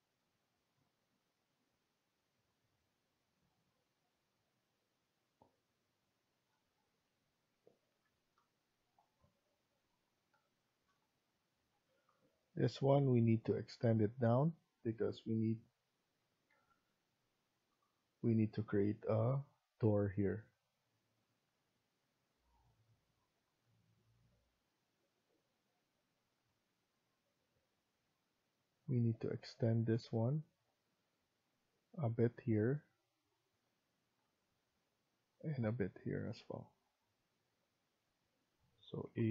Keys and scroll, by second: 16.4 Escape.